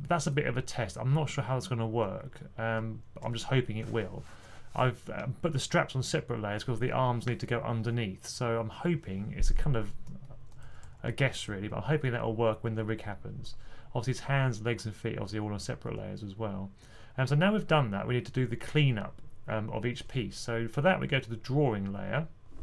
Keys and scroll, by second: 10.7 typing.